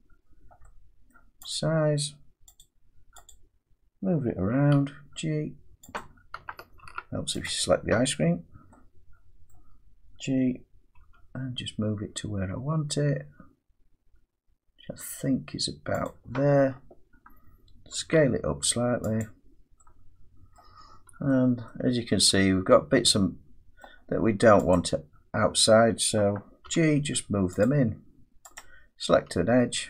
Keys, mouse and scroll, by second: 1.1 middle click, 1.5 click, 2.6 click, 3.3 click, 4.7 g, 5.9 click, 6.8 ctrl+z, 7.4 click, 9.5 middle click, 11.0 g, 16.0 click, 16.7 scroll up 1, 18.0 s, 19.2 click, 20.5 middle click, 20.8-21.5 scroll down 6, 21.7 middle click, 22.1 Tab, 22.1 scroll down 1, 22.9-23.6 scroll down 1, 23.8 middle click, 24.7 click, 26.6 g, 27.6 click, 28.5 click, 29.1 g.